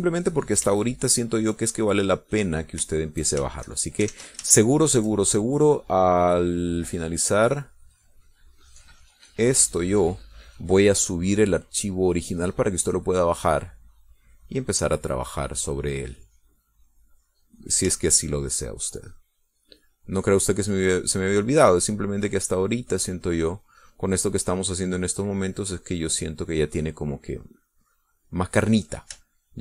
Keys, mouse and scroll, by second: 2.0 shift+click, 2.5 shift+click, 2.9-4.1 shift+drag, 4.6 shift+click, 5.4 ctrl+shift+z, 5.7 ctrl+shift+z, 5.9 ctrl+shift+click, 7.3 click, 10.2-11.5 drag, 11.6 middle click, 14.2 click, 14.7-19.1 drag, 19.6-21.1 shift+drag, 21.3-25.0 drag, 26.4-27.4 drag, 27.6-29.3 drag.